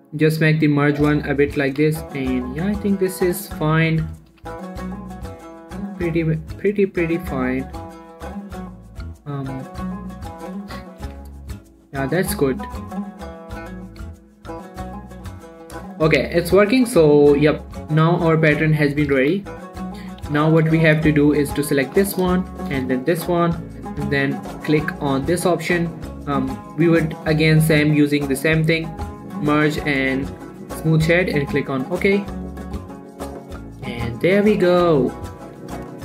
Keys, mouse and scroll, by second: 0.5 click, 1.4 scroll down 1, 1.6 shift+middle click, 2.1 a, 2.6-3.5 scroll up 2, 2.9 shift+middle click, 3.5 scroll down 1, 4.1-4.5 scroll up 1, 4.5 scroll down 1, 4.7 g, 4.9 y, 5.7 right click, 6.1-6.6 scroll down 1, 7.9 click, 10.7 scroll up 1, 11.4 Tab, 11.8 click, 14.6 scroll down 1, 15.2 shift+middle click, 16.6 click, 16.9-17.6 scroll up 1, 17.6 click, 19.6 ctrl+a, 19.8 click, 20.0 middle click, 20.4 shift+middle click, 21.0 middle click, 21.3 scroll up 2, 22.3 g, 22.5 right click, 22.9-24.0 shift+drag, 31.9 click, 33.3 middle click, 33.8 click, 34.3 shift+middle click, 34.5-35.0 shift+scroll up 2, 35.1 q, 35.3 click, 35.5 scroll down 1, 35.9 shift+middle click.